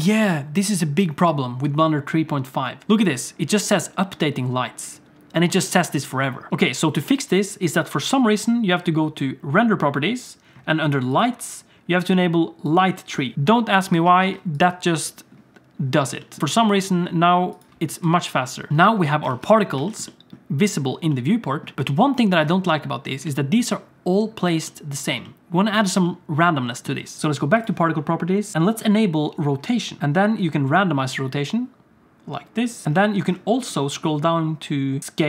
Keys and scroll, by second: 14.0 alt+a, 14.3 ctrl+s, 17.9 z, 18.7 alt+a, 18.7 ctrl+s, 18.7 alt+shift+z, 19.3 alt+shift+z.